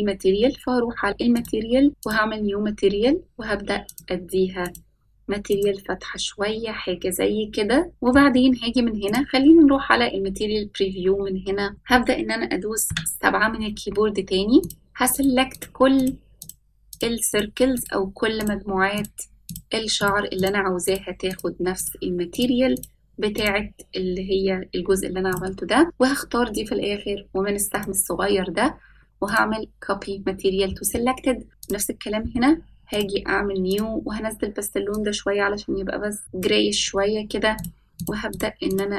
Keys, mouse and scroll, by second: 1.5 click, 2.7 click, 7.9 shift+middle click, 7.9-8.4 scroll down 2, 9.0 click, 10.7-11.4 scroll up 3, 11.4-11.9 middle drag, 13.0 KP_7, 14.8 click, 15.3 shift+click, 15.7 shift+click, 16.1 shift+click, 16.5 shift+click, 17.1 shift+click, 17.4 shift+click, 17.9 shift+click, 18.5 shift+click, 19.1 shift+click, 19.6 shift+click, 20.1 shift+click, 20.5 shift+click, 21.0 shift+click, 21.4 shift+click, 21.9 shift+click, 22.5 shift+click, 22.9 shift+click, 23.5 shift+click, 25.5 shift+click, 27.9-30.2 drag, 31.8 click, 33.1-33.9 drag, 37.6 click, 38.0 shift+click, 38.4 shift+click, 38.7 shift+click.